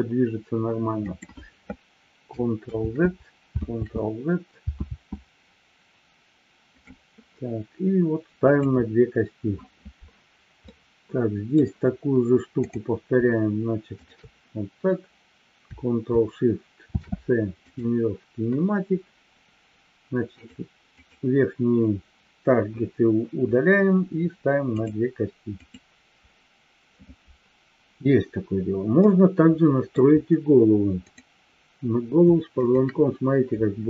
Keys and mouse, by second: 3.1 ctrl+z, 4.0 ctrl+z, 8.4 click, 10.6-11.6 middle drag, 12.5 click, 14.0-14.6 shift+drag, 16.7 ctrl+shift+c, 21.0 click, 25.6 click, 29.0-30.0 middle drag, 31.0-31.7 drag, 32.5 shift+click.